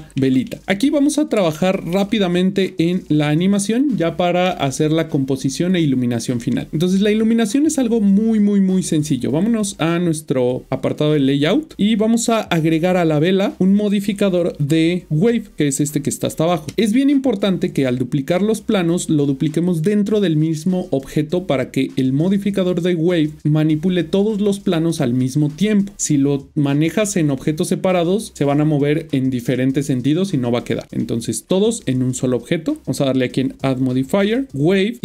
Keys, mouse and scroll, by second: 1.3 middle click, 3.1 click, 11.2 click, 13.8 click, 17.8 click, 18.7 middle click, 32.8 click.